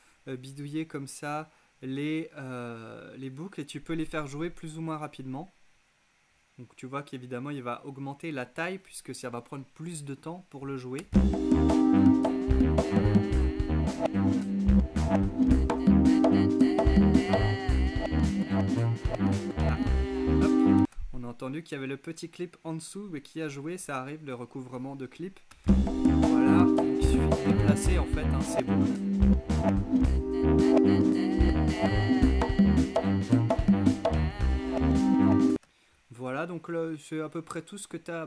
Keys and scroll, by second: 11.1 space, 20.9 space, 25.5 space, 35.5 space.